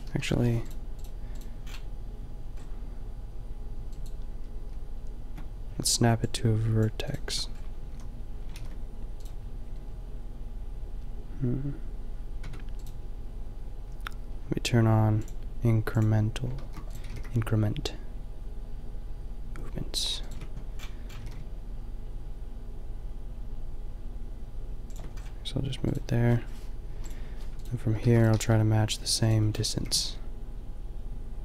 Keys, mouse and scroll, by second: 0.0 Delete, 1.6 click, 7.2 Tab, 7.8 a, 8.5 ctrl+r, 12.4 Tab, 16.5 shift+d, 17.0 g, 21.1 g, 25.2-26.9 middle drag, 26.9 Delete, 26.9 click, 28.0 shift+d, 28.3 g, 29.5 click, 29.7 g.